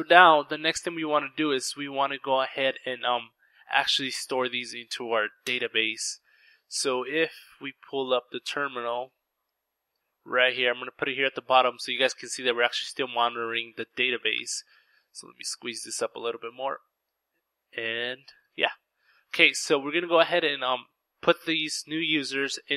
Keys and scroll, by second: 3.9 Return, 3.9-5.3 typing, 18.7 Return, 18.7 typing.